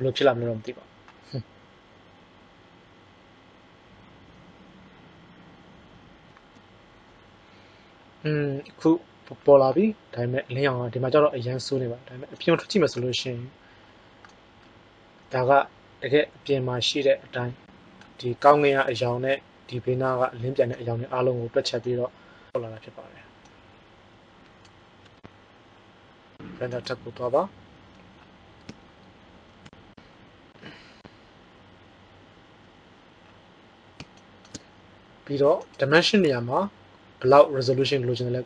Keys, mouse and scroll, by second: 19.2-19.7 middle drag.